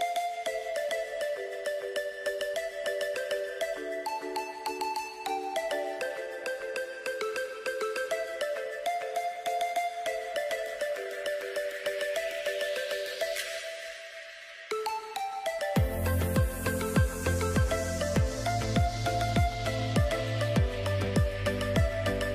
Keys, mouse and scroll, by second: 3.5 click, 6.1-7.0 typing, 7.5 Return, 8.6 typing, 20.2 click.